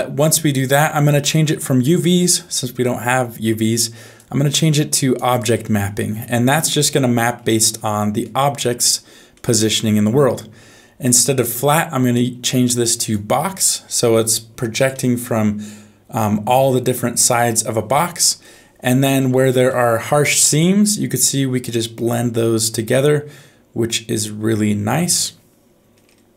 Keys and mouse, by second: 4.4 click, 6.8 middle click, 8.2 middle click, 9.3 middle click, 11.6-13.1 drag, 14.9-17.4 middle drag, 19.7 middle click, 21.4-25.1 drag.